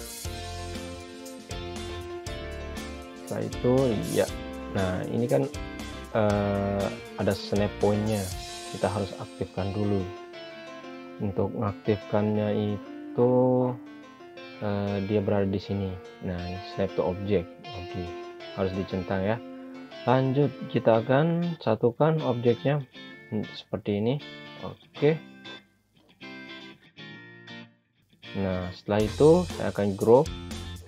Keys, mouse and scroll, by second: 0.6 typing, 1.4 Return, 3.7 click, 7.2 shift+click, 13.5 click, 18.9 click, 19.9 scroll up 1, 21.5 click, 26.4 scroll down 1, 27.5 click.